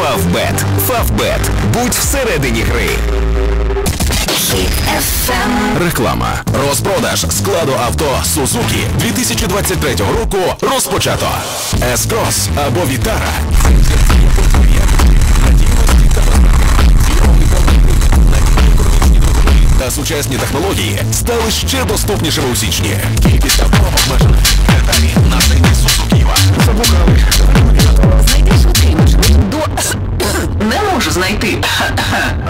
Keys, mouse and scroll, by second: 19.7 Page_Down, 29.4 Page_Down.